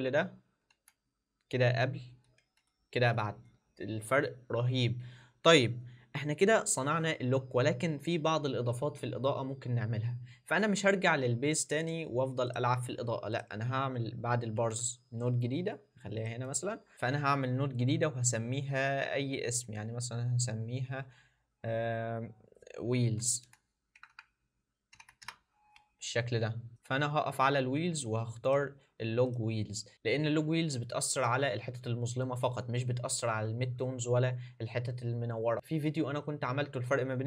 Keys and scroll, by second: 0.9 alt+d, 2.4 d, 15.1 alt+s, 23.0 shift+w.